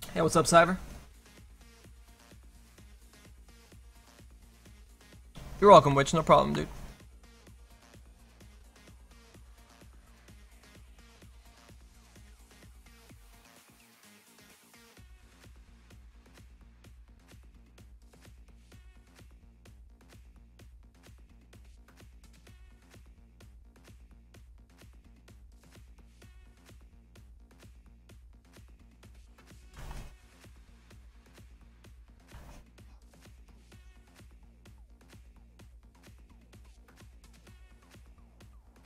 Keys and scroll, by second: 9.1 s, 21.4 s, 22.7 s.